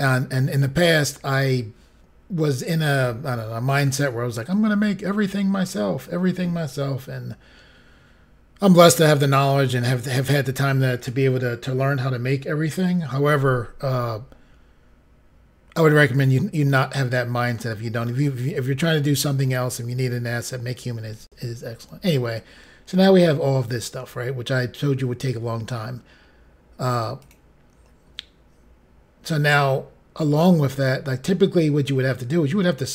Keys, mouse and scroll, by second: 27.2 click.